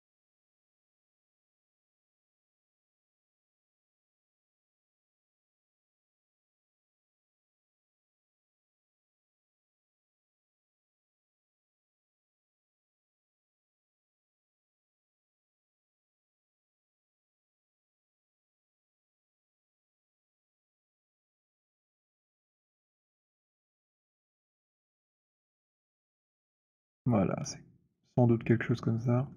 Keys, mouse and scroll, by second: 0.0 click, 2.7 click, 11.6 click, 13.6 click, 19.4-20.4 scroll, 22.2 alt+click, 22.9-23.5 scroll, 24.8 alt+click, 25.6 right click, 26.4 click, 29.1 click, 29.3 alt+scroll.